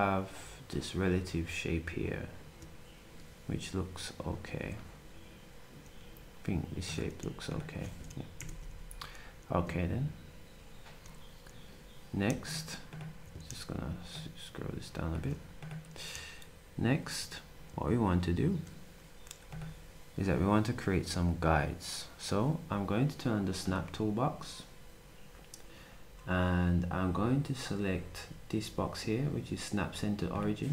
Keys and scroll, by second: 5.8 z.